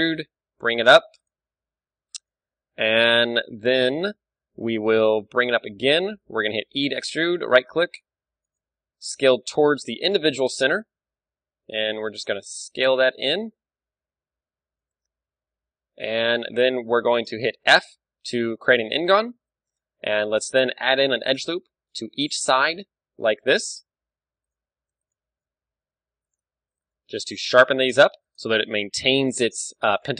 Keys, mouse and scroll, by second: 1.3 click, 1.7-4.9 middle drag, 4.9 KP_1, 5.3 g, 6.4-7.5 drag, 6.7 e, 7.5 middle click, 7.7 s, 8.3-10.7 right drag, 8.9 ,, 10.0 KP_7, 10.9-12.8 middle drag, 11.3 s, 14.9-16.7 drag, 17.7 f, 18.2-21.2 middle drag, 19.1 a, 20.4 ctrl+r, 22.0-23.8 drag, 22.4 ctrl+r, 24.6-26.2 drag, 24.9 ctrl+r, 26.4-28.0 drag, 26.7 ctrl+r, 28.4-30.0 drag, 28.8-30.1 middle drag, 29.5 ctrl+r.